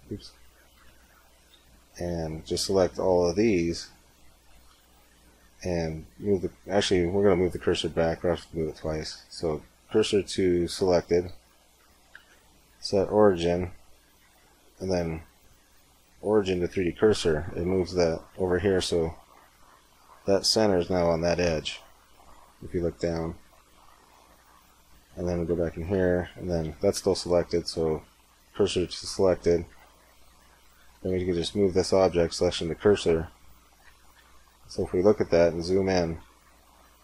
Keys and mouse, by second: 0.6 Tab, 1.2 a, 1.9 b, 4.4 shift+s, 8.9 shift+s, 11.5 Tab, 12.0 space, 18.8-22.0 middle drag, 20.0 z, 25.2 Tab, 26.8 shift+s, 29.6 Tab, 31.0 shift+s, 34.0 KP_7, 34.9 z.